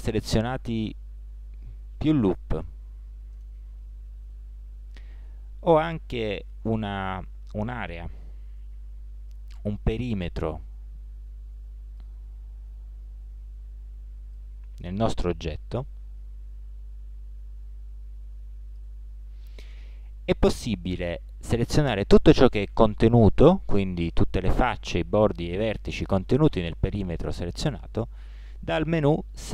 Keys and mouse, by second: 3.9-4.8 middle drag, 5.3-8.5 middle drag, 8.5 c, 29.4 middle click.